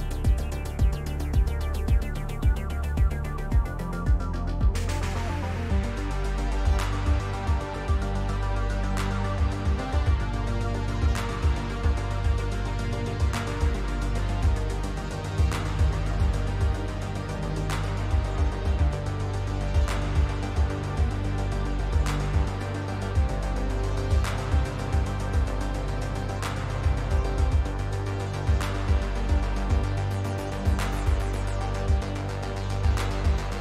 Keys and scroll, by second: 30.8 w.